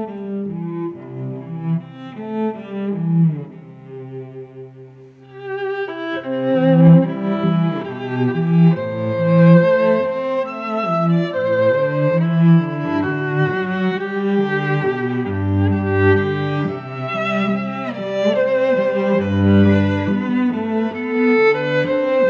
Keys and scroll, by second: 0.3 Left, 0.9 shift+Up, 4.0 shift+Down, 5.1 Return, 5.4 v, 5.9 ctrl+t, 7.8 Return, 8.0 0, 8.6 v, 12.0 v, 12.4 a, 14.1 Left, 15.9 shift+Right, 16.6 shift+Up, 17.3 shift+Right, 18.3 Return, 18.6 v, 19.4 a, 20.6 Up, 21.6 Return, 21.9 v.